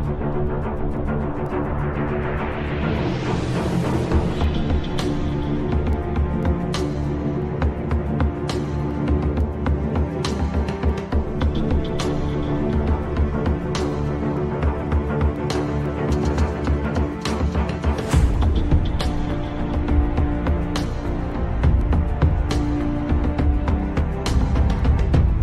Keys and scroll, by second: 0.3 Delete, 7.1 F3, 12.4 shift+Page_Down.